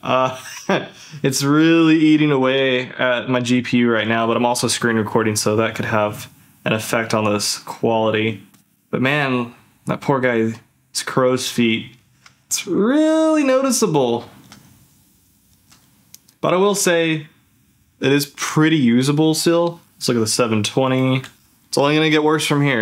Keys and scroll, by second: 13.6 ctrl+z, 14.2 ctrl+shift+z, 14.7 ctrl+z, 15.5 ctrl+shift+z, 16.3 ctrl+f, 19.7 ctrl+f, 19.8 z, 21.3 ctrl+f.